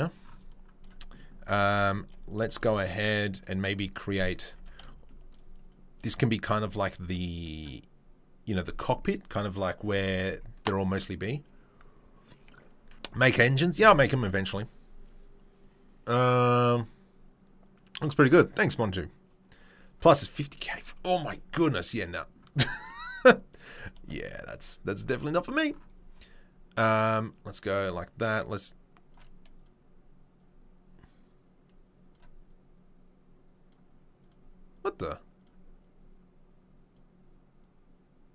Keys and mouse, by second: 0.8 click, 0.8-5.6 middle drag, 1.5 Tab, 4.2 Tab, 5.6 click, 5.7-27.4 middle drag, 27.4-29.1 drag, 29.1 middle click, 29.5 click, 29.6 middle click, 30.3-32.2 drag, 32.2 middle click, 32.4-33.7 drag, 33.7-34.7 middle drag, 34.7 click, 34.8-35.4 middle drag, 35.4 click, 35.5 middle drag, 35.8-37.0 drag, 37.0 middle click, 37.6 click.